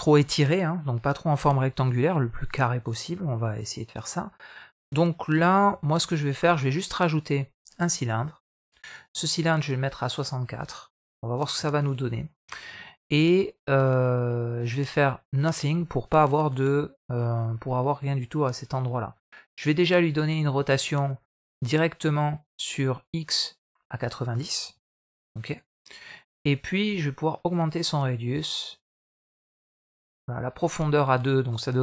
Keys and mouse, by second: 1.3-2.5 middle drag, 3.0-4.4 middle drag, 5.4 shift+a, 8.8 middle click, 10.0-11.7 drag, 12.4 middle click, 14.4-15.3 drag, 16.5-19.0 middle drag, 24.0-25.4 drag, 27.2-29.9 drag, 30.6-31.0 middle drag, 31.4-31.8 middle drag.